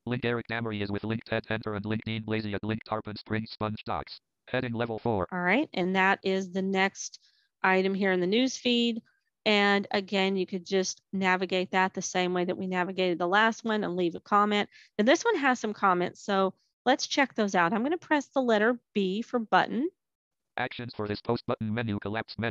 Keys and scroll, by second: 18.5 b.